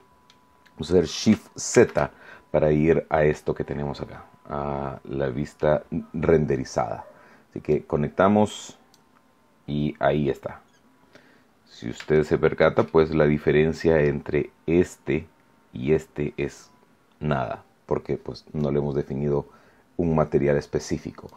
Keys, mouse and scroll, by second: 1.7 shift+z, 3.3-5.7 middle drag, 7.7-9.1 drag, 10.6-10.9 scroll up 1, 12.1 shift+middle click, 12.8-14.2 shift+middle drag, 21.2 click.